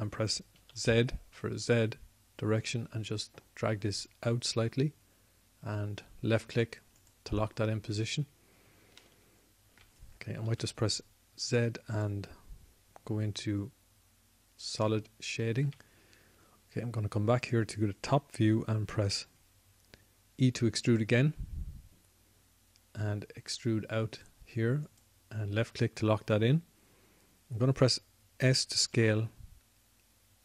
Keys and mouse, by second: 9.4-10.8 drag, 12.3 z, 22.4 e, 30.3 s.